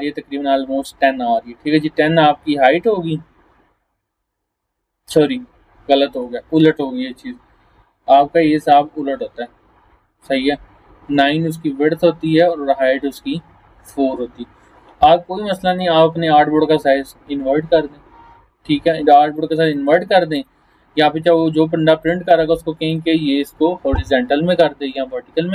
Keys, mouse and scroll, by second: 1.8-5.5 drag, 15.7 click, 19.4-20.0 click, 22.9 click.